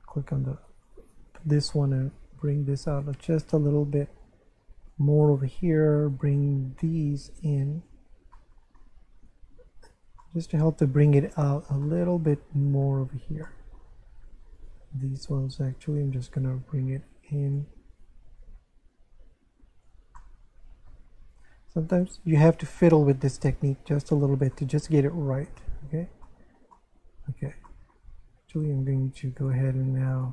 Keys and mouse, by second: 0.1 click, 1.3 right click, 2.0 click, 3.4 right click, 4.2 click, 6.0 shift+right click, 6.9 click, 8.3 middle click, 9.2 Tab, 10.2 shift+middle click, 11.8 middle click, 13.0 Tab, 13.5 shift+middle click, 14.6 right click, 15.2 shift+right click, 16.1 click, 17.9 right click, 18.4 click, 20.2 middle click, 21.3 right click, 21.9 shift+right click, 22.9 click, 24.5 middle click, 25.4 Tab, 26.2 shift+middle click, 27.7 shift+middle click, 28.8 Tab, 29.4 right click, 30.1 shift+right click.